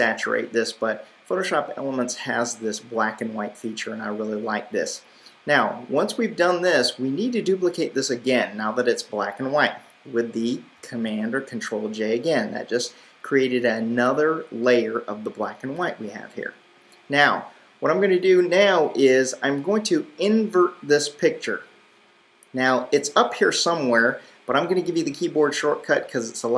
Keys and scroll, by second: 10.8 super+j.